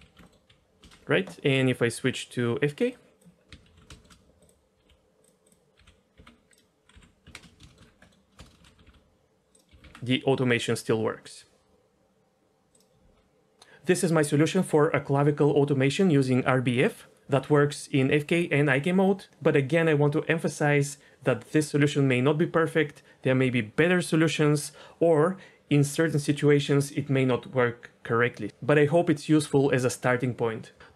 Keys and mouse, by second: 0.2 click, 0.8 n, 2.9 click, 3.7 alt+h, 3.9 shift+click, 4.7 t, 6.2 t, 6.2 r, 6.9 n, 7.3 ctrl+space, 7.6 shift+middle drag, 8.0 middle click, 8.6 shift+h, 8.8 r, 9.7 r, 9.8 r.